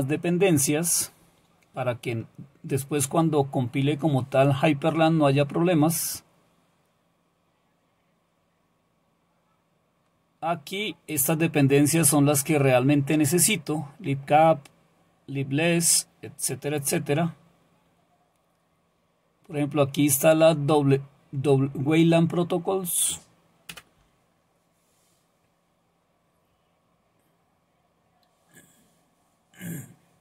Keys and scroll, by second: 23.7 Return.